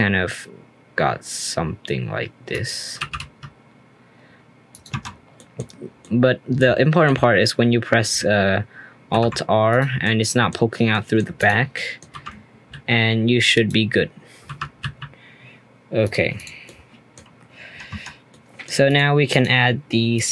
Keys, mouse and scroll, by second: 3.0 r, 4.9 Tab, 5.1 scroll down 1, 5.3-5.8 middle drag, 5.8 scroll down 2, 6.0-9.1 middle drag, 9.1 alt+r, 9.7 click, 10.0-11.3 middle drag, 11.3 click, 11.7 scroll down 1, 11.7-12.1 middle drag, 12.1 r, 14.4 r, 16.3 click, 16.6 middle click, 17.6 Tab, 17.9 Tab, 18.3-18.8 middle drag, 18.8 click, 19.3 click.